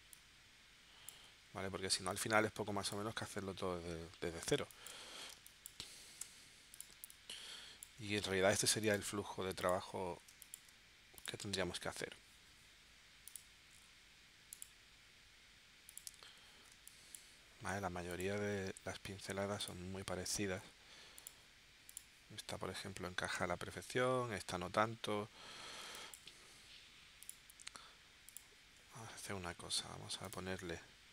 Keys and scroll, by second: 4.6 space, 5.3 space, 6.2 v, 6.9 space, 10.4 space, 16.7 space, 25.8 space.